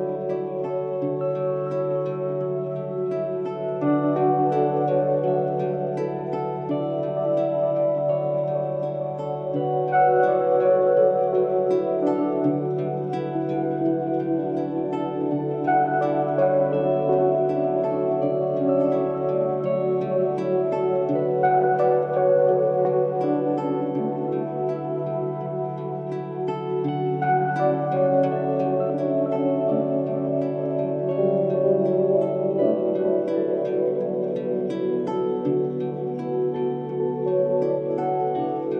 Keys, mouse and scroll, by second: 1.1 click, 10.4 click, 13.8 click, 15.4-16.9 typing, 18.8-19.2 scroll down 1, 21.0-29.7 drag, 31.8-33.7 typing, 32.5 click.